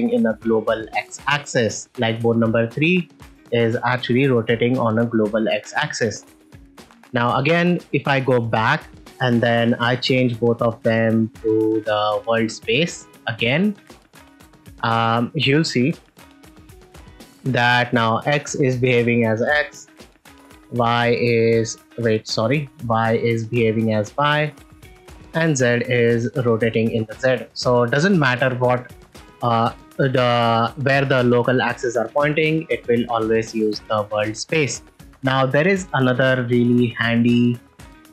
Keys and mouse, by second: 7.6 click, 9.6-12.3 drag, 12.9-13.7 drag, 16.6 r, 16.7 x, 20.0 r, 20.1 y, 22.5 r, 22.6 y, 25.0 r, 25.1 z, 27.0 right click, 32.3 click, 37.4-38.1 drag.